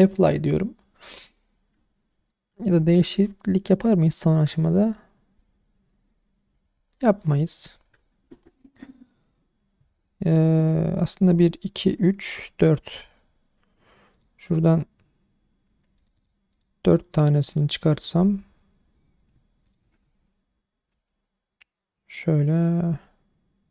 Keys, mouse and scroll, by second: 7.8-10.8 scroll up 1, 14.1 click, 16.0 click, 16.2 click, 16.5 click, 17.3 click, 19.6 shift+click, 20.9 r.